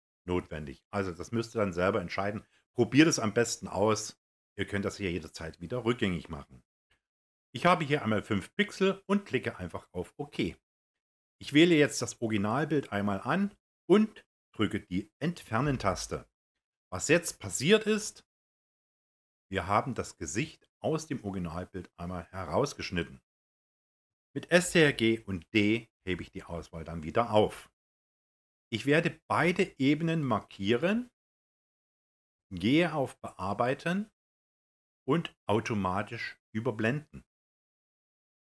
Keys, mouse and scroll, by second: 15.4 Delete, 24.2 ctrl+d, 29.7 ctrl+click.